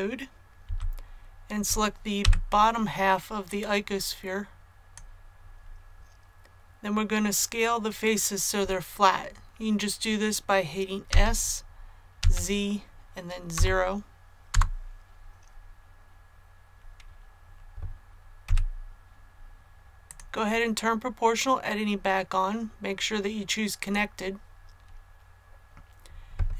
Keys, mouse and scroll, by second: 0.6 a, 2.1 b, 3.4-5.5 drag, 11.0 s, 12.1 z, 13.5 KP_0, 14.5 Return, 19.5 click.